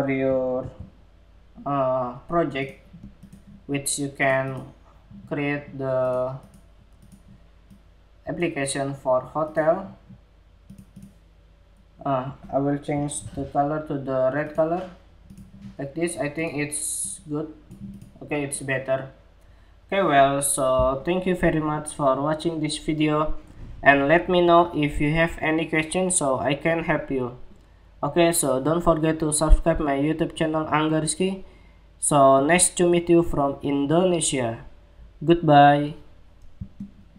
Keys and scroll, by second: 0.1 ctrl+c, 12.7 ctrl+c, 37.0 shift+super+2.